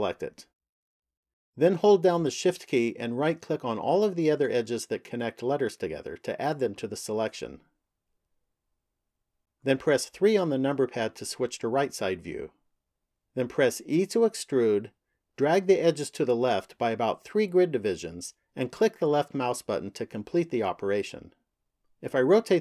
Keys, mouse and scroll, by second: 0.5 right click, 3.5 shift+right click, 4.7 shift+right click, 6.2 shift+right click, 7.4 shift+right click, 8.9 shift+right click, 10.6 KP_3, 14.1 e, 21.6 middle click.